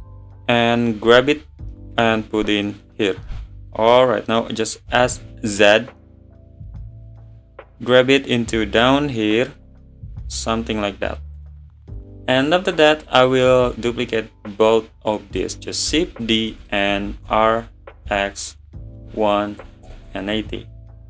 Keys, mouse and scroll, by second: 2.8 click, 4.9 s, 7.2 scroll up 5, 8.4 click, 10.3 click, 10.5 middle drag, 10.7 scroll up 1, 10.9 scroll down 5, 11.1-12.0 middle drag, 12.0 scroll down 2, 12.5-13.1 middle drag, 13.1 scroll down 2, 13.5 drag, 16.3 shift+d, 17.2 r.